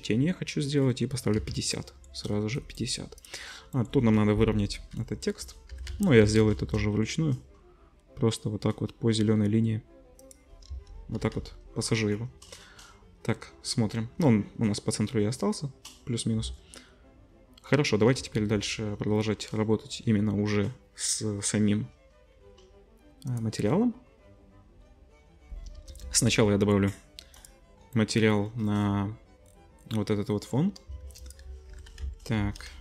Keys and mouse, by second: 1.3 z, 3.2-5.5 middle drag, 4.3 KP_3, 5.7 g, 10.7 KP_0, 11.2 z, 11.5 middle click, 18.2 ctrl+s, 21.1-24.8 middle drag, 24.9-27.3 middle drag, 25.7 KP_0, 27.3-32.8 drag, 31.0 shift+a.